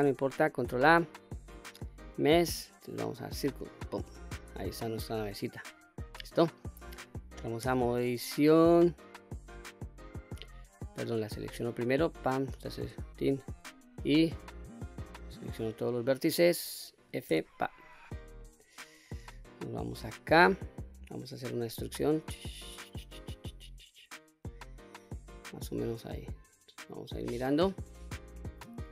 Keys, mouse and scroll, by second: 0.4 shift+a, 7.7 Tab, 9.8 click, 10.5 click, 11.6 Tab, 12.1 click, 12.9 Tab, 13.4 1, 15.6 click, 17.3 f, 18.5 middle click, 19.1-20.0 scroll up 1, 20.0 scroll up 1, 20.2 shift+middle click, 21.5 e, 25.7 click, 26.2-27.7 middle drag, 28.2-28.9 middle drag.